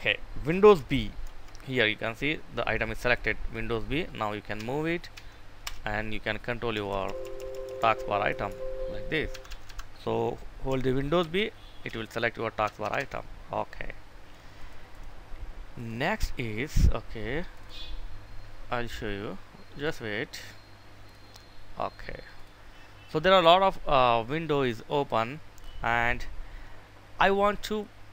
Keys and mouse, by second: 1.0 super+b, 4.4 Right, 4.9 Right, 5.5 Return, 6.6 Left, 6.8 Left, 7.1 Left, 7.4 Left, 9.0 Escape, 10.9 super+b, 11.6 Right, 12.5 Escape, 14.4 click, 14.5 right click, 15.5 click, 19.5 click, 22.5 click, 23.3-28.1 drag.